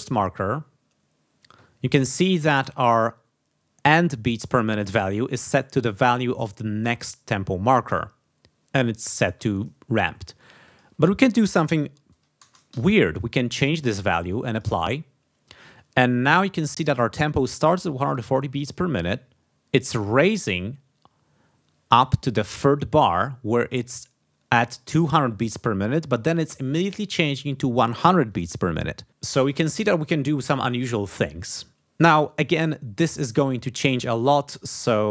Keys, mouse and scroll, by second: 10.6 click, 12.4 BackSpace, 12.7 2, 14.5 click.